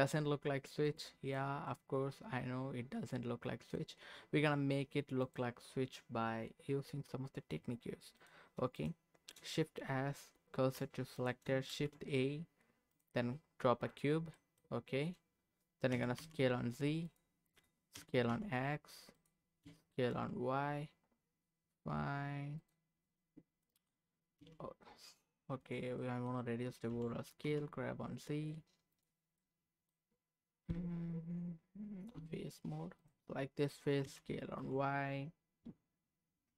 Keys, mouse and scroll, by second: 0.8 click, 1.4-3.7 middle drag, 4.1 scroll down 1, 5.2 click, 8.2 click, 8.7 click, 9.8 shift+s, 11.2 click, 11.7 shift+a, 13.5 scroll down 1, 14.3 scroll down 2, 14.3 middle click, 15.9 s, 16.2 z, 17.0 click, 18.0 s, 18.3 x, 19.2 click, 19.6 s, 20.1 y, 22.6 click, 22.9-23.6 scroll up 2, 23.6 middle click, 24.4 s, 25.6 click, 26.0 middle click, 26.9 g, 27.4 z, 28.9 click, 29.2 scroll up 1, 29.4 middle click, 30.7 Tab, 33.0 click, 34.0 s, 34.6 y.